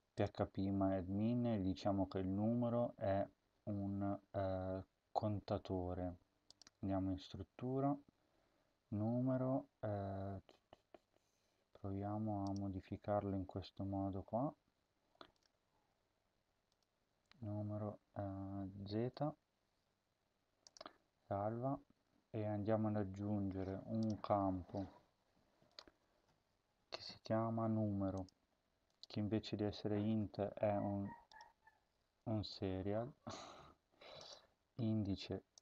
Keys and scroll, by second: 19.1 z.